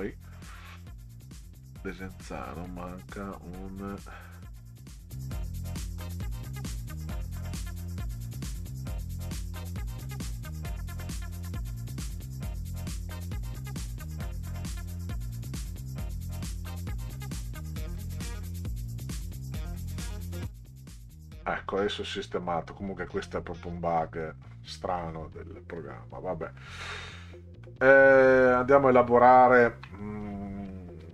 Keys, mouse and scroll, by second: 2.7 ctrl+click, 4.7 ctrl+click, 4.9 ctrl+click, 5.1 ctrl+click, 6.2 ctrl+middle click, 6.5 click, 7.2 scroll up 2, 7.7 click, 8.1 click, 8.4 click, 9.0 click, 9.5 click, 9.7 click, 9.9 1, 10.1 KP_Enter, 11.7 click, 11.9 click, 12.0 click, 12.9 click, 13.1 Return, 13.4 Delete, 13.8 click, 14.2 click, 14.9 click, 15.5 click, 15.9 click, 16.0 click, 16.3 click, 16.6 click, 16.9 click, 18.2 click, 20.1 click, 21.1 click, 24.1-24.7 scroll down 2, 25.1-25.5 scroll down 2, 26.6 middle click, 27.6 scroll down 2, 27.7 middle click, 29.3-29.8 ctrl+scroll down 4.